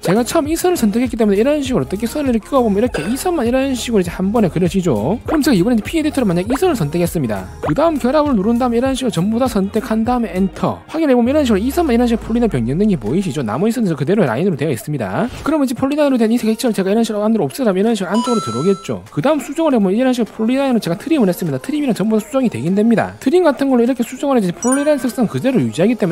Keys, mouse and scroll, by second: 1.0 click, 2.2-5.2 drag, 7.1 click, 8.2 click, 9.1 click, 9.8 click, 10.7 right click, 14.0 click, 14.3 click, 14.7 click, 18.0 click, 18.4 click, 18.6 right click, 19.1 click, 19.7 click, 19.9 right click, 20.5 r, 20.6 right click, 20.8 click, 21.2 click, 21.5 click, 22.1 click, 22.3 right click, 23.4 e, 23.5 right click, 23.8 click, 24.1 click, 24.2 right click, 24.7 r, 24.8 right click, 25.3 click, 25.6 click, 25.7 right click.